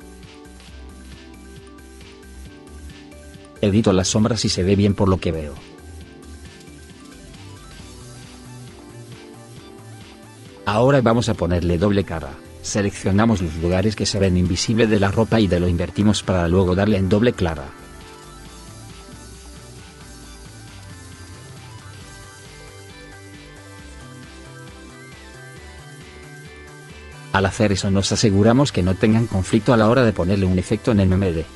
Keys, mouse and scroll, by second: 0.1 right click, 4.5 right click, 5.7 right click, 7.3 right click, 10.3 right click, 13.1 middle click, 13.4 right click, 20.5 right click, 26.2 right click, 29.7 right click.